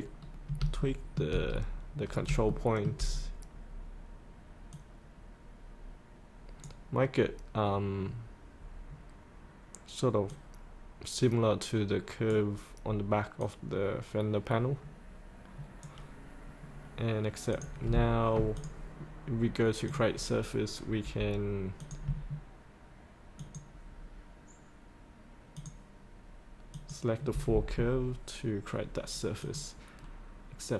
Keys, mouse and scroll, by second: 0.2-0.6 scroll down 1, 0.7 shift+middle click, 1.1 shift+middle click, 1.6-2.0 scroll down 1, 2.0 scroll up 1, 2.5 shift+middle click, 4.7-16.4 drag, 16.4-17.5 scroll up 1, 17.5 click, 23.3 ctrl+click, 25.5 ctrl+click, 29.4 click.